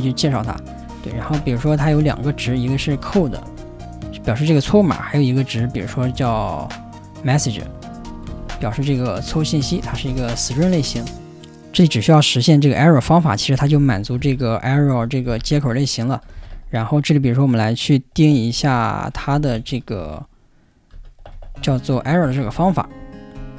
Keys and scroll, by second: 1.1-3.7 typing, 4.5 Return, 5.9-10.7 typing, 13.3-15.4 typing, 16.3 ctrl+n, 16.5 Tab, 18.5-19.6 typing, 19.9 ctrl+j, 20.9-23.5 typing.